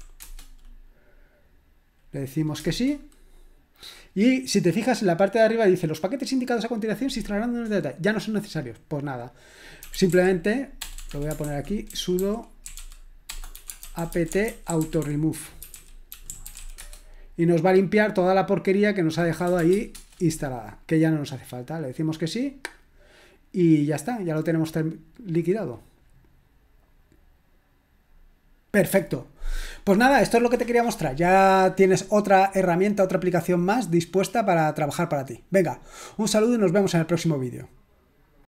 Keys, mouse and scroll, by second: 0.0-0.2 typing, 2.6 Return, 9.6-17.0 typing, 11.4 ctrl+l, 19.6-20.0 typing.